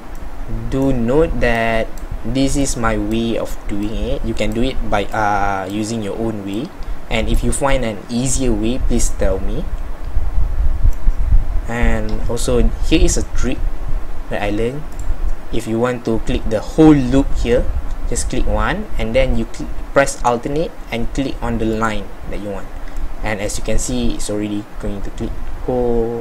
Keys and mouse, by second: 0.3 middle click, 0.5-8.4 middle drag, 9.5 middle click, 23.1 middle click, 23.6 middle click, 24.3-26.2 middle drag.